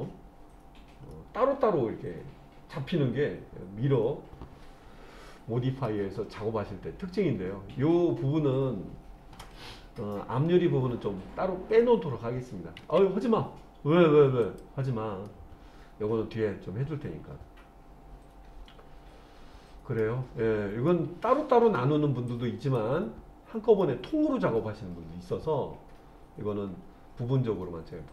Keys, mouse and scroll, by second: 1.1-5.9 middle drag, 12.8 ctrl+z, 14.4 click, 15.3-20.0 middle drag, 20.9 middle click, 22.3 click, 23.8-28.1 middle drag.